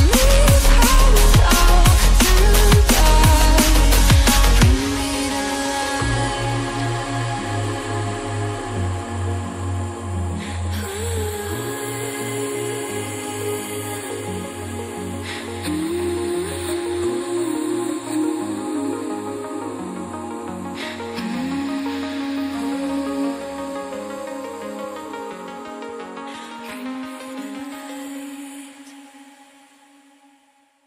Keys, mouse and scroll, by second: 2.8-3.3 scroll down 1, 3.3-4.7 scroll up 1, 4.7 click, 10.7 scroll down 1, 10.9 scroll up 1, 11.5 click, 12.5-13.5 scroll down 1, 13.9 click, 14.6 double click, 14.8 scroll up 1, 16.0 click, 18.7-19.3 scroll up 1, 19.3 click, 23.3 double click, 24.1 click, 29.4 Down, 30.2-30.8 scroll down 1.